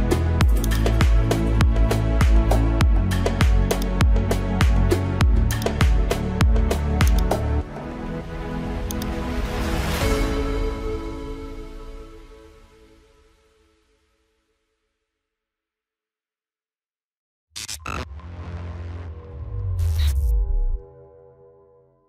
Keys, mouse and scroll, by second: 0.7 click, 5.5 click.